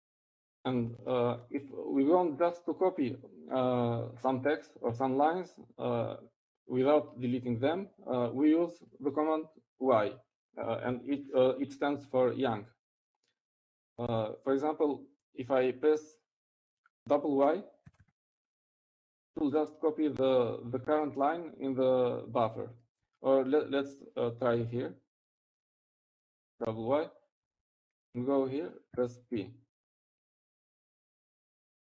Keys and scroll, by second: 11.6 Up, 20.7 typing, 26.1 Down, 28.7-29.1 typing, 30.1 Down.